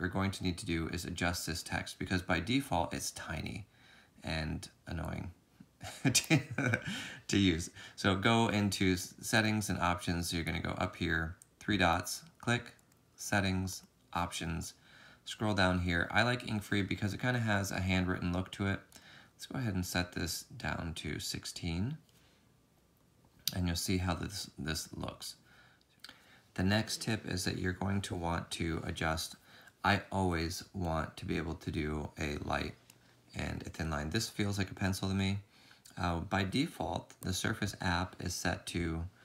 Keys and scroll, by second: 24.8 z, 35.9 ctrl+z.